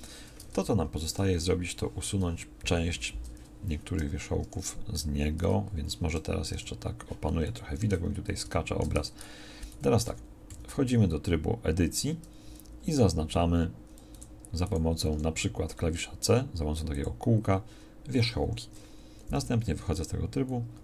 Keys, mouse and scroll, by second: 0.5 Tab, 2.1 KP_1, 3.0 shift+c, 4.5 KP_Decimal, 6.5 KP_Decimal, 9.0 Tab, 9.7 a, 10.1 a, 10.5 z, 15.1 c, 19.8 KP_6.